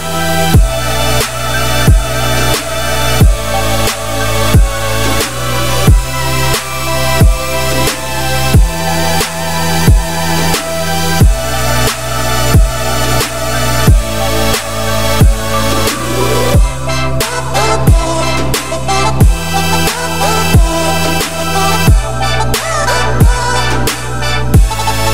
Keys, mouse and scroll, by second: 2.2 shift+r, 4.6 middle click, 5.0 click, 5.4 `, 6.2-7.6 shift+middle drag, 7.6 e, 19.7 shift+click, 20.0 shift+middle click, 20.7 Tab, 21.0-22.7 scroll down 5, 22.7-23.1 scroll up 5, 23.6-25.1 shift+middle drag.